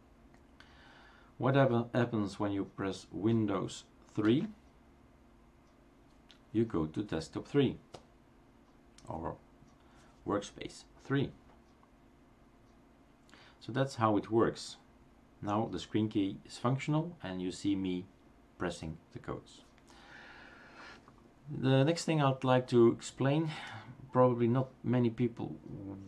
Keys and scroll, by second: 4.3 super+".